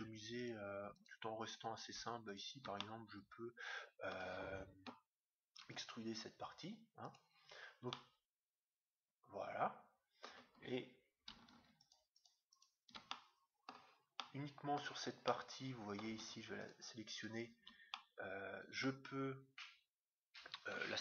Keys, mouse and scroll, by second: 0.9-3.9 right drag, 2.8-4.6 middle drag, 5.6 e, 7.5-8.0 scroll up 1, 8.0-9.7 middle drag, 11.7-14.2 right drag, 13.1-16.8 middle drag, 16.6-18.7 right drag, 17.9-19.6 middle drag.